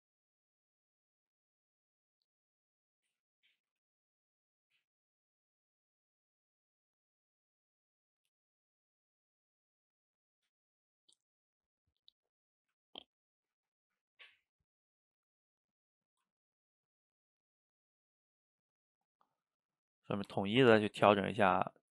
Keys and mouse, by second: 0.1 middle click, 1.0 click, 1.4-2.5 middle drag, 2.5 click, 3.3 middle click, 3.7 f, 4.1 middle click, 4.5 click, 5.3 middle click, 5.9 click, 6.4 middle click, 6.9 click, 7.4 middle click, 8.0 f, 8.5 middle click, 9.1-10.1 drag, 10.1-12.6 middle drag, 12.6 f, 13.1 middle click, 13.9-20.3 drag, 20.3-21.9 ctrl+middle drag.